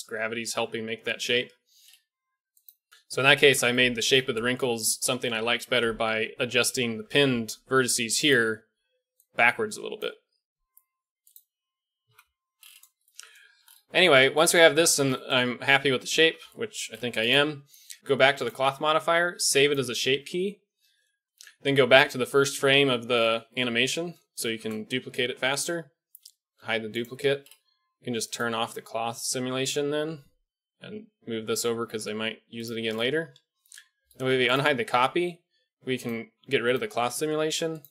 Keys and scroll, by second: 7.0-10.2 d, 12.0 KP_1, 16.2 KP_1, 21.5 shift+Left, 24.8 shift+d, 26.5 h, 29.9 g, 33.7 alt+h, 34.2 a.